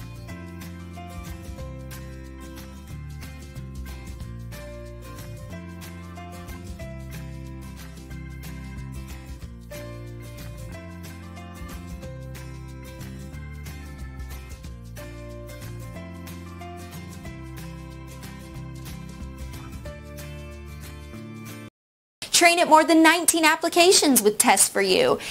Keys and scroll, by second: 6.8 Return, 11.9 Return, 14.8 Return.